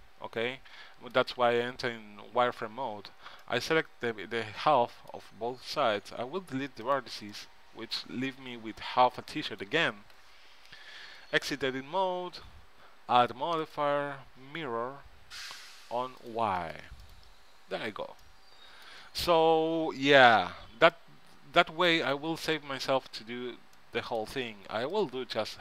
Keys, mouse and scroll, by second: 1.6 z, 2.1 z, 6.1 x, 7.6-9.4 middle drag, 11.1 Tab, 12.5 ctrl+Up, 13.4-15.6 drag, 16.4-17.9 drag, 17.9 ctrl+Up, 18.5 click, 20.6 Tab, 25.1-25.6 drag.